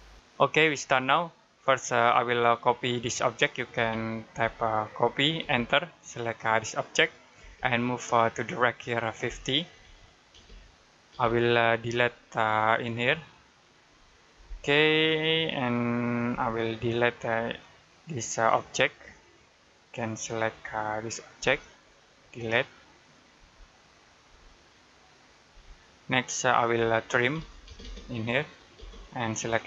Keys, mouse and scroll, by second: 0.0 click, 1.4 middle click, 3.6 c, 5.3 space, 6.0 click, 7.2 space, 7.5 click, 9.1 typing, 10.2 space, 11.3 middle click, 11.9 click, 14.2 Delete, 15.1 click, 16.1 Delete, 16.4-17.1 scroll up 1, 17.4 click, 21.2 Delete, 21.3 scroll down 1, 21.6 middle click, 22.0-22.7 scroll up 1, 22.7 click, 23.2 Delete, 23.7 click, 24.1 Delete, 25.0 click, 25.3 Delete, 27.2 t, 27.5 space, 28.3 click, 28.6 space, 28.7 click.